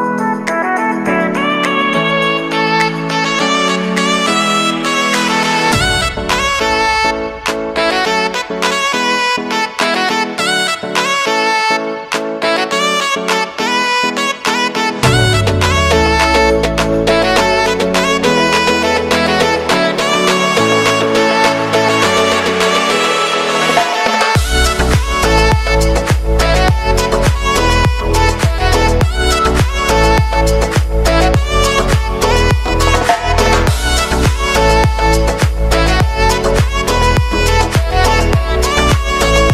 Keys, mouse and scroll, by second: 0.0-0.7 typing, 2.3 click, 7.2 ctrl+n, 8.5 ctrl+n, 12.2-14.1 typing, 15.5-24.1 drag, 26.6 click, 33.7 click, 38.4 click.